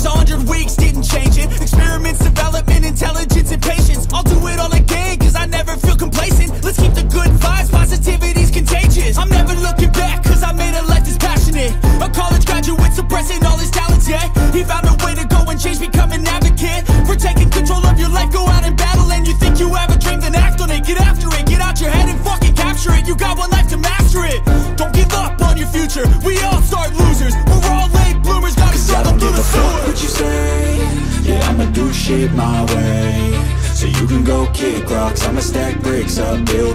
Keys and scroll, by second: 13.6 ctrl+alt+z, 20.3 ctrl+alt+z.